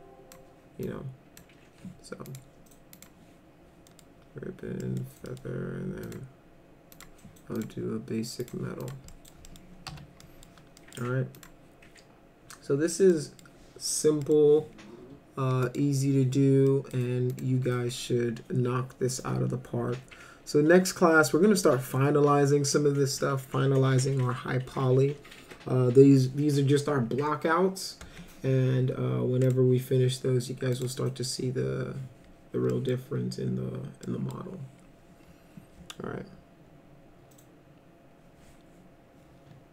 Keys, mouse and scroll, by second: 0.9 ctrl+click, 2.3 click, 2.9 click, 3.9 middle click, 4.8 middle drag, 5.3 middle drag, 6.1 click, 7.0 click, 7.6 click, 8.4 click, 8.8 click, 9.1 middle drag, 9.5 middle click, 9.9 F4, 10.2 middle drag, 10.8 middle drag, 11.4 click, 13.1 middle click, 14.2 middle click, 15.6 click, 16.7 middle drag, 17.3 click, 29.5 click, 30.8 click, 32.7 middle click, 34.1 middle click.